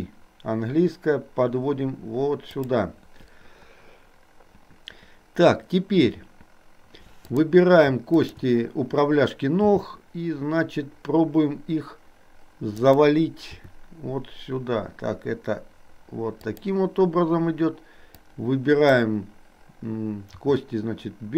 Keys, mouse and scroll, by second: 7.2 click, 8.2 shift+click, 9.7 g, 13.6 r, 18.3 click, 20.5 r.